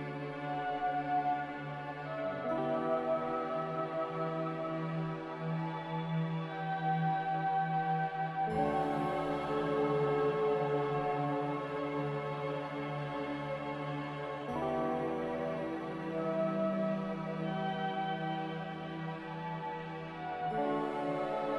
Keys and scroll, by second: 0.9 q, 3.0 z, 4.3-5.3 typing, 8.2-9.0 typing, 12.1 c, 13.0 q, 15.3 z, 16.9-17.7 typing.